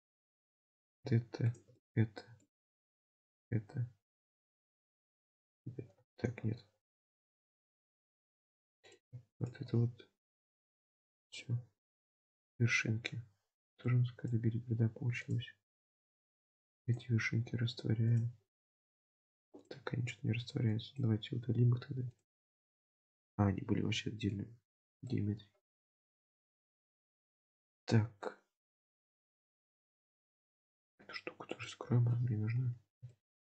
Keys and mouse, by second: 0.4 middle click, 1.5 shift+click, 1.8 middle click, 3.2 shift+click, 3.7 x, 6.2 ctrl+z, 6.5 x, 8.2 1, 8.9 click, 9.8 x, 11.4-12.9 middle drag, 13.9 click, 16.0 middle click, 16.8 click, 20.7 click, 23.1-24.3 middle drag, 24.9 shift+middle click, 26.0-29.5 middle drag, 30.2 middle click, 31.5 click, 33.1 shift+middle click.